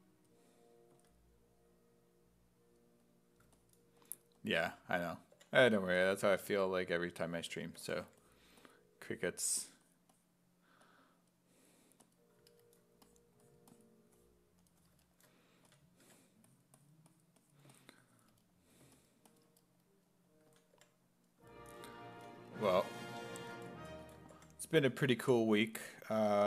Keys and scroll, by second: 0.0-0.9 typing, 4.9 s, 5.4 5, 6.5-8.6 typing, 15.7 s, 16.1 1, 20.5 s, 20.8 5, 22.2-25.2 typing.